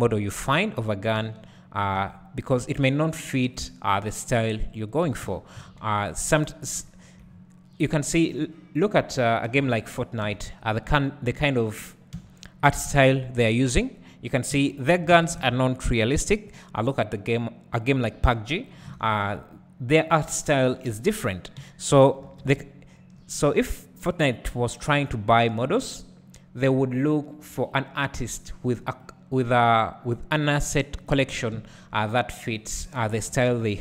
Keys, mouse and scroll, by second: 1.2 g, 2.9 click, 5.1 g, 6.9 `, 7.3-9.0 scroll down 2, 9.0 click, 9.6 `, 10.3 3, 10.7 click, 11.1 shift+click, 12.2 f, 12.7 click, 13.0 shift+click, 14.6 f, 15.1 alt+a, 15.4 1, 15.8 click, 16.6 shift+click, 18.7 j, 19.3-20.2 scroll down 1, 20.2 click, 20.7 shift+click, 21.6 j, 22.0 scroll up 1, 22.3 alt+a, 22.6 `, 23.4-23.8 scroll up 1, 23.8-24.9 scroll down 1, 24.9 k, 31.6 `, 32.6 click, 33.6 g.